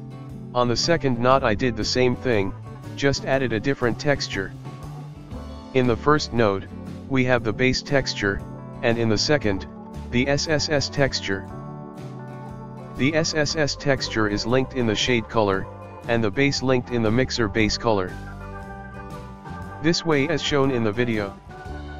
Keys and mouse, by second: 4.4 click, 6.4-11.2 ctrl+middle drag, 11.2 click, 16.6 click, 19.8 click.